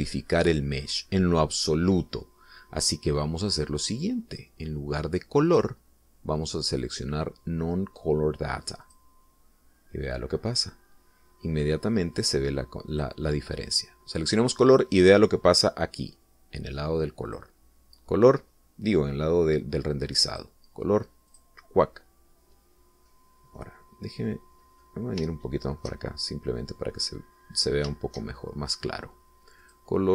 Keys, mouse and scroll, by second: 1.2-1.6 scroll up 1, 1.9 scroll down 1, 7.0 click, 10.3 click, 11.8-12.3 scroll up 1, 14.4 click, 18.8 click, 21.8 click, 22.8 click, 25.1 middle click, 26.0-26.4 scroll up 2, 26.8 shift+middle click, 27.8 shift+middle click, 28.7-29.0 scroll up 2.